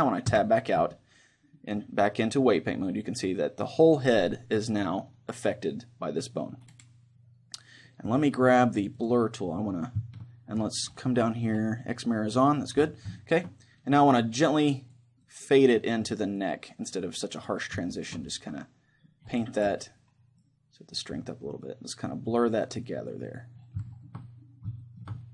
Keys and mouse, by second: 0.4 Tab, 0.9-7.4 middle drag, 9.1 click, 13.2-15.5 middle drag, 14.8-19.0 drag, 17.9 middle click, 19.0-20.0 middle drag, 20.4-25.2 drag, 24.0-25.3 middle drag.